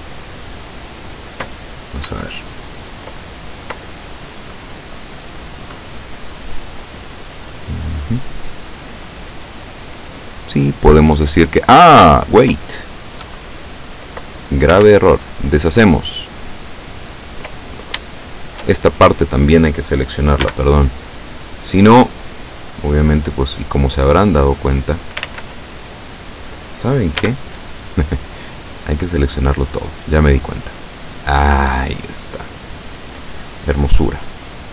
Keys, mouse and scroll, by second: 1.1-1.4 scroll down 1, 2.1 KP_7, 6.8 scroll down 1, 7.3-12.5 middle drag, 13.4 KP_7, 14.3-14.7 scroll up 2, 14.9 ctrl+z, 17.6-18.0 ctrl+scroll up 2, 18.2 shift+middle click, 20.6 b, 21.5-22.7 drag, 23.4-25.3 drag, 25.3 ctrl+z, 27.3 b, 28.2-29.8 drag, 30.4-33.6 drag.